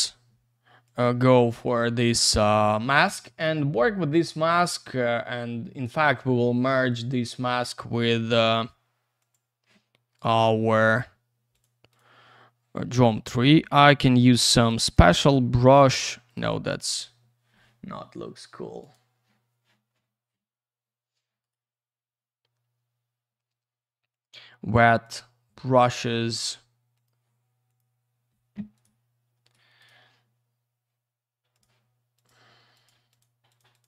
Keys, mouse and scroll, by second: 0.8 click, 0.9 click, 4.1 click, 9.2 click, 10.1 right click, 11.5 click, 11.9 click, 14.6 click, 14.7 click, 14.9 click, 15.0 double click, 15.9 ctrl+z, 16.3 right click, 16.3 right click, 18.8 click, 18.9 click, 21.4 right click, 21.5 right click, 24.1 click, 24.2 click, 25.0 click, 25.1 click, 26.1 scroll up 1, 26.9 click, 27.7 click, 28.7 right click, 29.3 ctrl+z, 29.8 right click, 31.5 click, 32.2 click, 32.7 click, 32.8 click, 33.1 click, 33.2 click, 33.5 click, 33.6 double click, 33.7 click, 33.8 click.